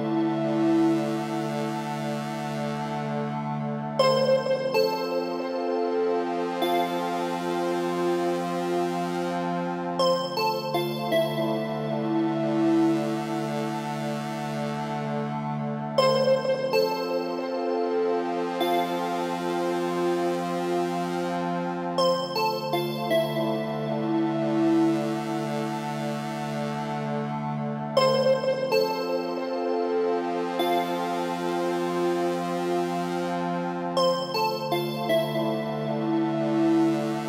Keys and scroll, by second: 4.3 ctrl+g, 8.7 Return.